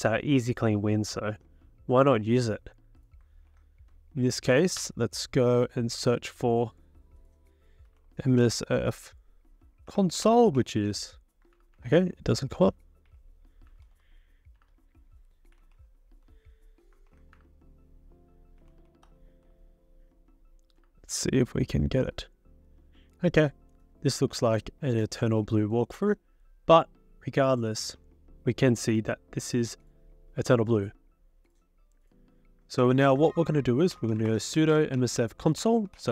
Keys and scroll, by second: 3.5 ctrl+f, 4.8 BackSpace, 7.6-11.1 typing, 11.5 ctrl+BackSpace, 11.8 ctrl+BackSpace, 12.5-17.1 typing, 18.9 ctrl+a, 32.8 ctrl+c, 33.1 ctrl+c, 33.7-36.1 typing.